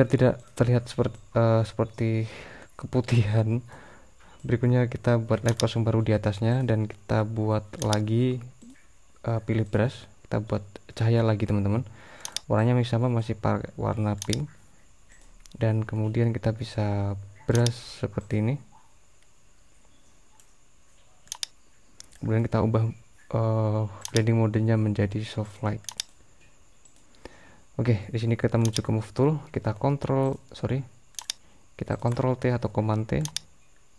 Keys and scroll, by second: 29.8 super+t.